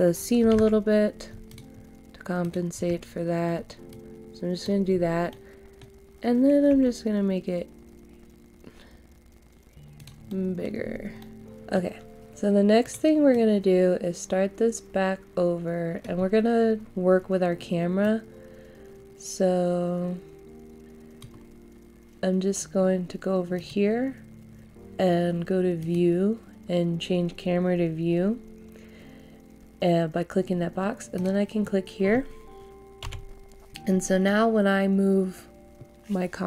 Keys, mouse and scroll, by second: 0.5 ctrl+z, 1.5 shift+click, 2.4 shift+click, 3.9 click, 4.9 scroll down 1, 5.3 middle click, 6.8 s, 9.9 click, 10.2 middle click, 10.8 scroll up 1, 11.2 middle click, 12.8-21.7 drag, 34.2 middle click.